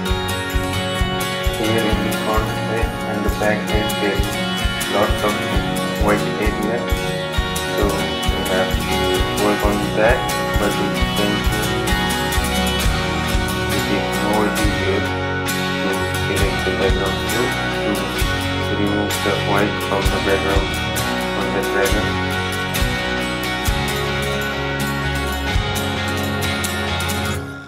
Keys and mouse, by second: 1.3-10.6 drag, 1.3 typing, 5.7 typing, 11.0 right click, 11.4 click, 13.1 click, 14.5 click, 21.0 typing, 26.0 right click, 26.2-27.6 drag.